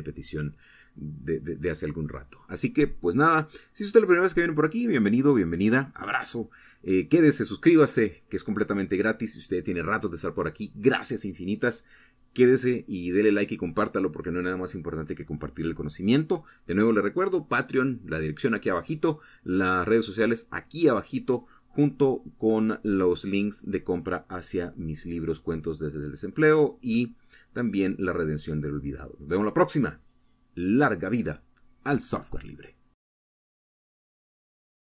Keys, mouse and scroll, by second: 29.5 click, 30.7 click, 31.7 click, 33.1 click.